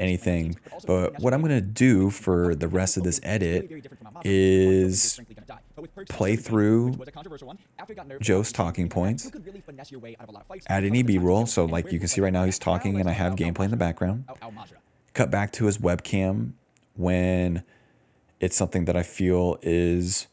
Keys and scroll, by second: 0.0-1.7 typing, 1.6 ctrl+s, 7.3 d, 9.0 d, 10.7 d, 12.3-14.7 typing, 18.6-20.3 typing.